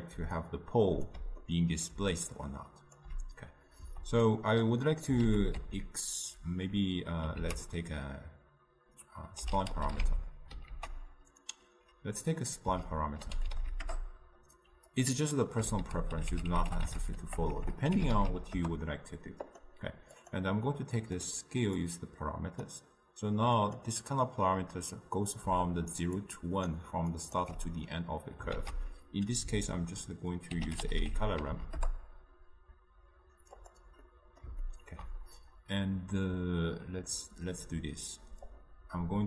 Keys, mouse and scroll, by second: 0.5 click, 1.1 d, 1.5 middle click, 2.0 d, 2.4-14.0 drag, 18.7 BackSpace, 21.5-23.0 drag, 25.7 right click, 26.3-31.9 drag, 38.8-39.2 drag.